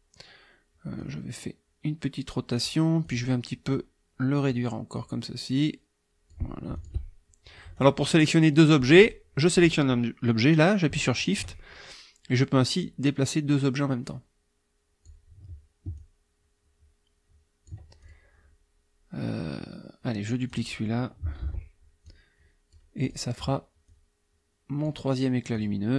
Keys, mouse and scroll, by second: 1.0-2.8 drag, 3.0 click, 3.7 click, 4.9-6.5 drag, 6.8 shift+click, 7.7 click, 9.0 click, 11.2 shift+click, 12.8-15.3 drag, 16.0 ctrl+click, 18.0 ctrl+click, 20.5 click, 21.4 ctrl+d, 22.0 click, 23.0 click, 23.9-25.1 drag, 25.6 click.